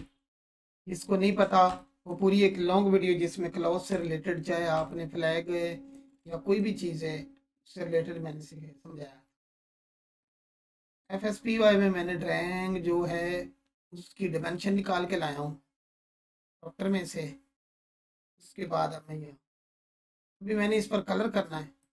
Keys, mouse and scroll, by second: 0.8-1.4 ctrl+alt+click, 1.7-2.4 alt+shift+drag, 4.0-4.6 alt+shift+click, 4.9-6.1 ctrl+alt+drag, 7.9-16.0 drag, 21.8 click.